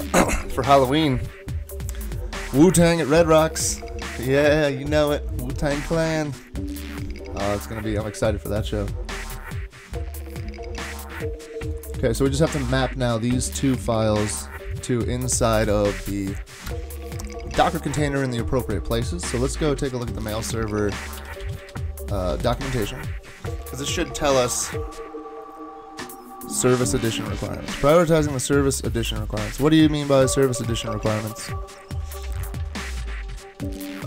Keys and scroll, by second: 19.3 super+Tab, 20.0 super+Tab, 20.9-22.9 typing.